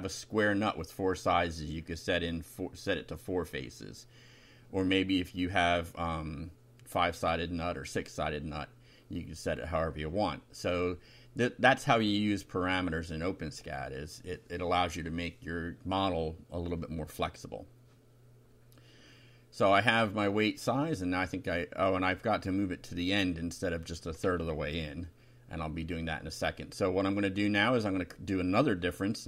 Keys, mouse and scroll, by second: 0.5-1.8 drag, 2.4-3.7 drag, 4.4 click, 5.4 BackSpace, 6.6 click, 7.7 ctrl+c, 8.4 click, 9.3 Return, 9.5 ctrl+v, 9.6 ctrl+Up, 9.9 ctrl+End, 11.0 =, 12.9 6, 13.8 ;, 14.3 Down, 14.9-16.1 typing, 16.2 Down, 24.5 Down, 25.0 Up, 26.9 Home, 27.2 shift+Down.